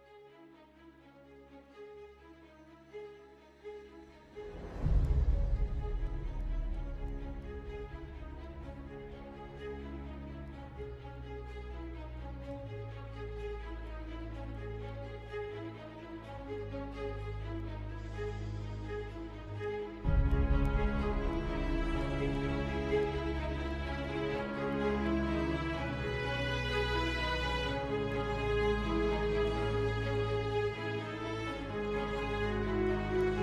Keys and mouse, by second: 0.0 f, 1.3 click, 2.5 f, 5.9 click, 7.1 f, 8.1 click, 9.3 f, 10.1 middle click, 12.0 click, 14.7 shift+click, 16.3 f, 17.2 click, 18.6 click, 20.5 shift+click, 21.8 f, 23.0 middle click, 24.2 KP_7, 26.4 shift+middle click, 27.7 g, 32.8 shift+click.